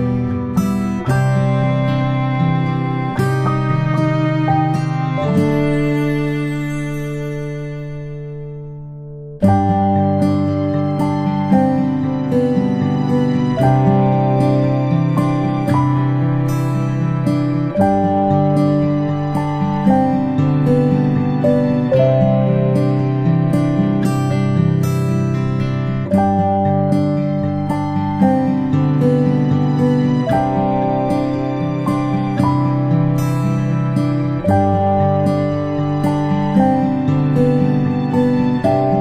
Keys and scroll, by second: 16.0-16.4 ctrl+space, 38.6 ctrl+space, 38.8 ctrl+space.